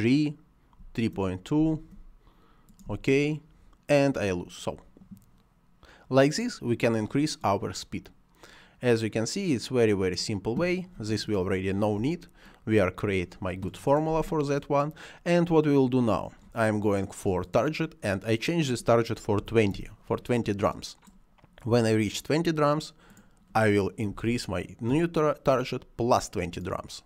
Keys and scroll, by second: 2.2 space, 11.9 Delete, 19.2 2, 19.6 Return, 23.9 2, 24.7 Return.